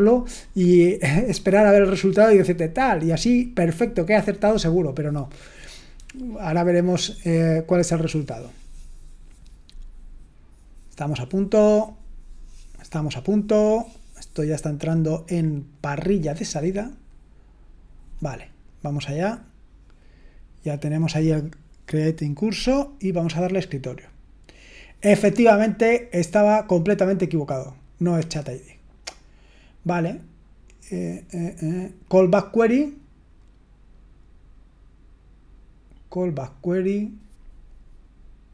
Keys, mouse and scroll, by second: 23.3 click.